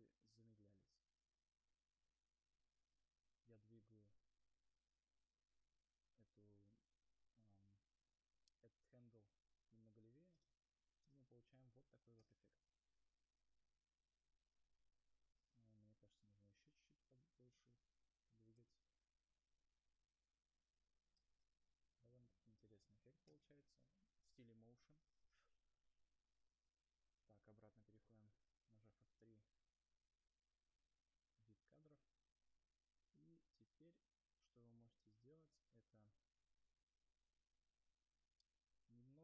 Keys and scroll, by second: 13.6 space, 15.4 0, 21.8 0, 30.8 shift+F3.